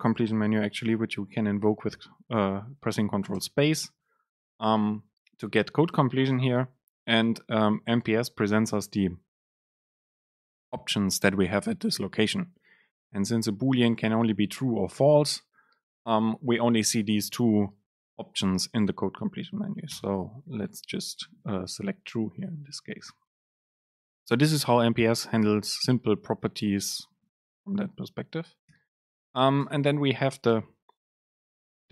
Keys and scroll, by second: 3.5 super+space, 28.7 Down.